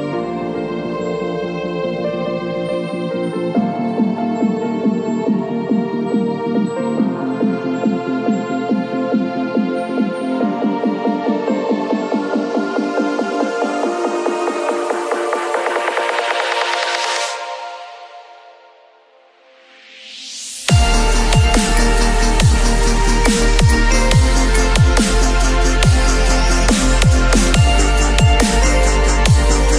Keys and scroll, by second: 1.8 b, 3.2 [, 12.1 [, 14.4 x, 14.8 [, 18.3 [, 21.8 x.